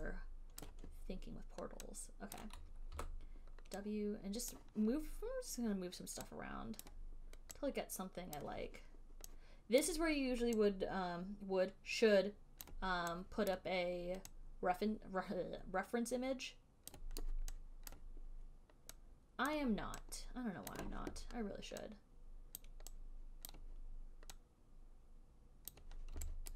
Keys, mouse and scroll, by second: 0.0 alt+middle click, 1.0 click, 2.7 click, 3.2 w, 4.8 click, 7.1 click, 8.6 click, 10.2 click, 12.9 click, 13.9 click, 17.2 click, 18.2 click, 19.8 click, 21.1 click, 23.0 click, 23.8 click, 26.0 click.